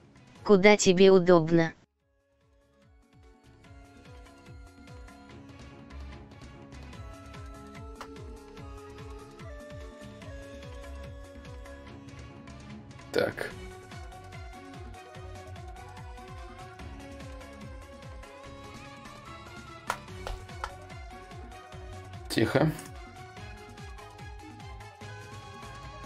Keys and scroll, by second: 19.3 ctrl+a, 24.9 ctrl+shift+v.